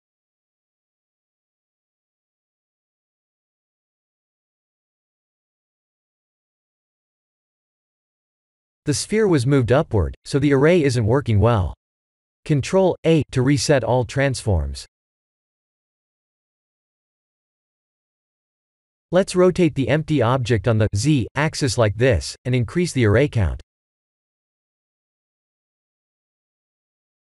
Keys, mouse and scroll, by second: 0.3 click, 2.3 click, 5.8 middle click, 6.3 middle click, 6.8 KP_1, 7.4 scroll down 4, 13.1 click, 14.1 ctrl+a, 21.4 click, 23.0 click.